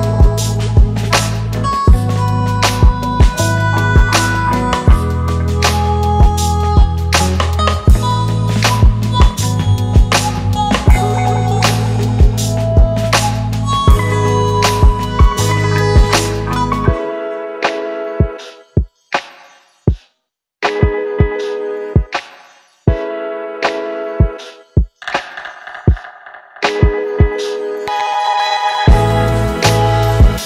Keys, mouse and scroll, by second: 5.8 double click, 17.8 alt+scroll down 1.